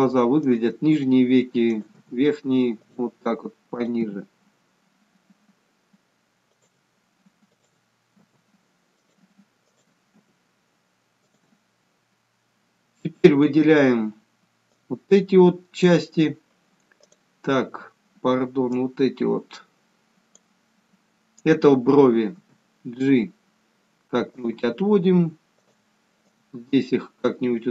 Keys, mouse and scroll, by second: 2.0 click, 4.0 click, 4.2 g, 7.7 click, 8.4 g, 9.8 click, 10.5 g, 14.9 click, 17.3 click, 22.4 g, 25.8 click, 26.5 click.